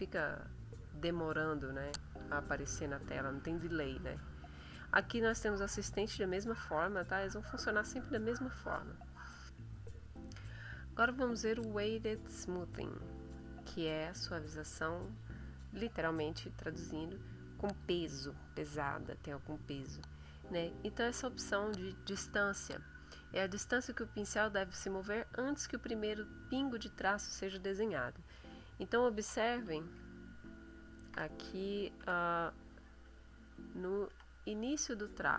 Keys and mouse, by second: 0.1 click, 0.8 click, 1.5 click, 6.7 click, 7.9 click, 9.5 click, 30.2-31.3 shift+middle drag, 32.0 5, 33.2-35.2 ctrl+middle drag.